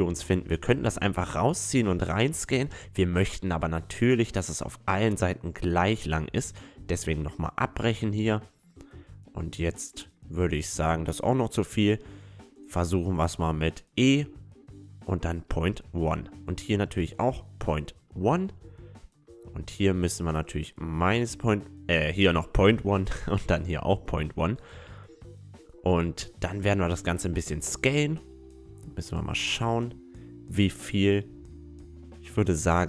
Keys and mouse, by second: 0.2 s, 4.5 ctrl+z, 4.8 ctrl+z, 6.2 ctrl+z, 7.2-9.1 right drag, 7.8 e, 11.9 ctrl+z, 12.3 ctrl+z, 13.7-15.5 right drag, 14.1 e, 16.4-18.0 right drag, 16.8 e, 18.3-19.6 middle drag, 19.6-21.4 right drag, 20.4 e, 21.8-22.8 middle drag, 22.8-24.7 right drag, 23.3 e, 24.7 middle click, 25.7 click, 26.5-27.8 right drag, 26.7 a, 27.8-30.0 drag, 29.1 s, 32.4 s.